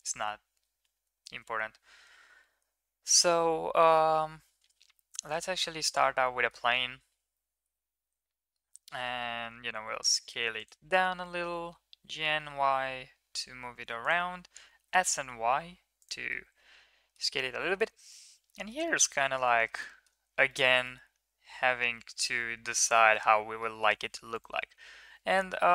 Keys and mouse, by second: 0.9 shift+a, 6.2-6.6 drag, 7.5 click, 8.0 s, 16.2-17.3 middle drag, 17.7 KP_1, 18.6 middle drag, 19.5 middle click, 19.8 middle drag, 20.9-23.0 middle drag.